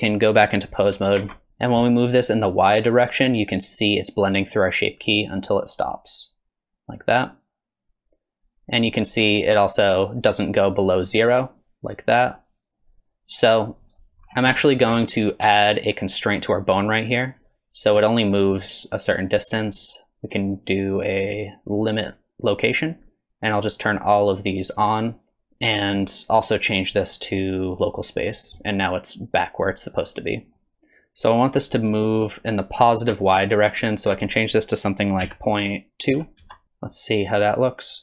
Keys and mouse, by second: 0.0 click, 1.2 ctrl+Tab, 2.8-9.3 drag, 10.1-14.0 drag, 14.6 shift+click, 17.3 click, 19.4-22.7 drag, 23.9-25.5 drag, 26.9-28.2 drag, 34.0-36.6 drag, 37.1-38.0 drag.